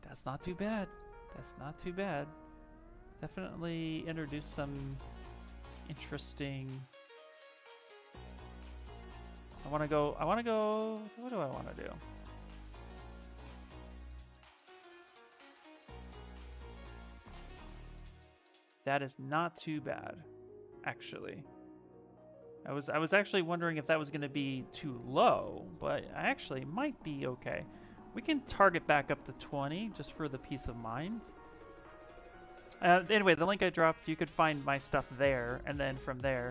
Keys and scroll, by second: 6.2 ctrl+z, 9.4 ctrl+z, 10.0 2, 11.2 ctrl+shift+z, 23.5 ctrl+z, 25.2 2.